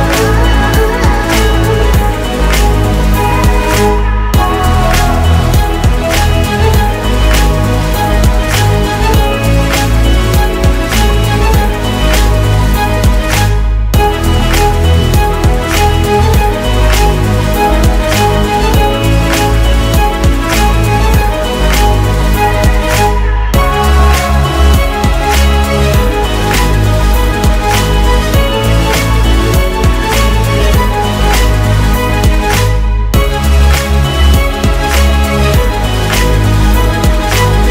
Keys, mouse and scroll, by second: 0.2 0, 0.4 alt+Down, 1.4 alt+Right, 2.6 alt+Right, 4.5 shift+click, 5.2 shift+click, 6.3-7.4 typing, 14.1 typing, 16.1 u, 16.8-17.2 alt+scroll down 1, 21.9 alt+click, 25.8 typing, 27.4 typing.